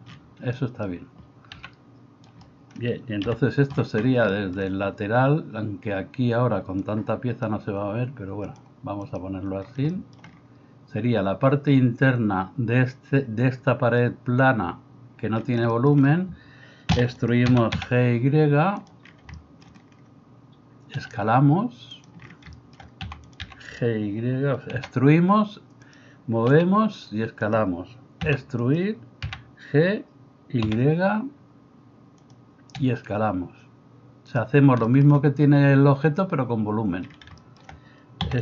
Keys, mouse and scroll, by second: 1.7 g, 3.2 KP_3, 9.2-38.4 middle drag, 17.0 e, 17.5 g, 21.0 s, 23.1 e, 23.5 g, 28.3 e, 29.3 g, 32.8 s, 38.3 e.